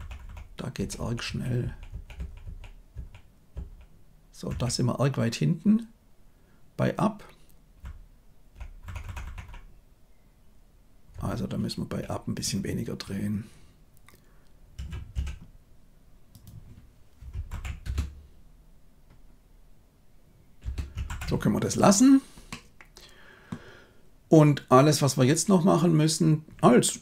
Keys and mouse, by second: 0.2 Left, 0.7 Right, 0.9 Right, 1.2 Right, 1.6 Right, 1.8 Right, 2.1 Right, 2.4 Right, 2.9 Right, 3.5 Right, 4.4 Left, 7.8 Left, 8.3 Left, 8.3 Left, 8.4 Left, 8.8 Left, 9.0 Left, 9.2 Left, 11.1-11.9 Right, 14.7 r, 17.5 shift+Left, 17.8 space, 20.5 space, 21.0 shift+Left, 22.4-23.5 middle drag.